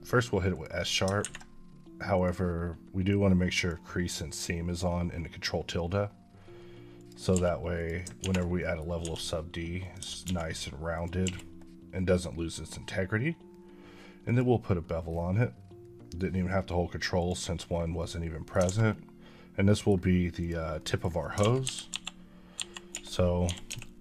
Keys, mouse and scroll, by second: 0.4 click, 2.0 click, 6.8 click, 7.2 q, 7.6 click, 8.1 ctrl+1, 8.4 middle click, 8.8 s, 9.6 click, 9.8 s, 10.1 z, 10.8 click, 14.1 click, 17.0 click, 17.5-17.8 scroll down 2, 17.8 middle click, 18.6 a, 18.7 middle click, 20.2 click, 20.6 middle click, 21.3-23.5 typing, 23.9 Escape.